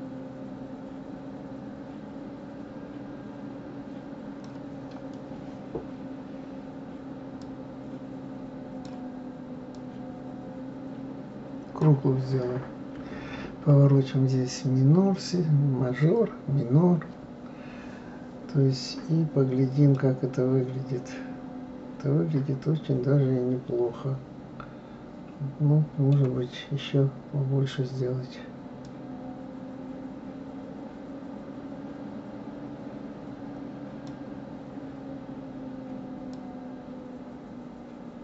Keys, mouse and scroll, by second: 7.4-12.7 drag, 19.9-22.9 middle drag, 28.8-31.9 drag, 36.3-38.2 drag.